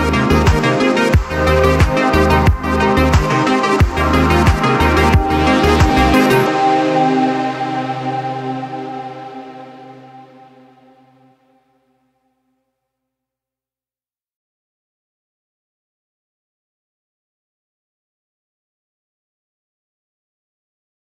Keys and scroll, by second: 3.7-5.6 typing, 8.2-9.2 typing, 9.4 Return, 15.1-16.7 typing.